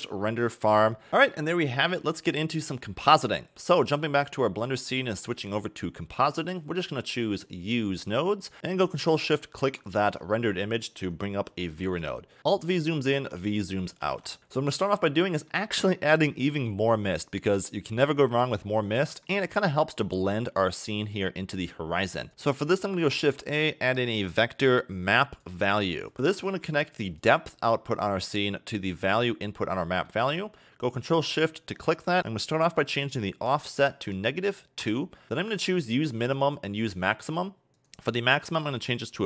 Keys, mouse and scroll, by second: 3.2 click.